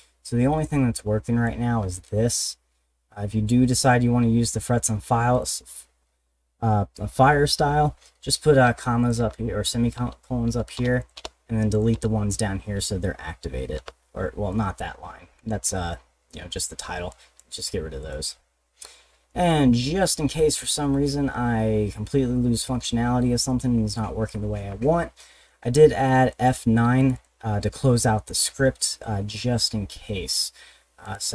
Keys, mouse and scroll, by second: 0.6 click, 4.6 middle click, 5.3 click, 8.6 ;, 9.0 click, 9.2 ;, 10.8 BackSpace, 11.0 click, 11.2 BackSpace, 11.7 click, 11.9 BackSpace, 13.8 ;, 14.5 click, 17.1 click, 18.0 click, 18.3 middle click, 21.1 middle click, 21.9 middle click, 26.3 click, 27.0 click, 27.1 click, 31.0 click.